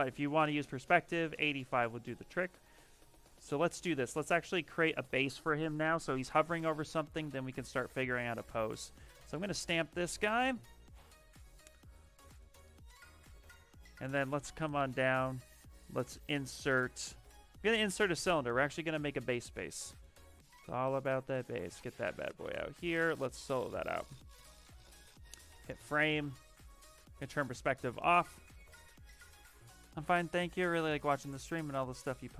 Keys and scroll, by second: 24.9 f, 27.6 s.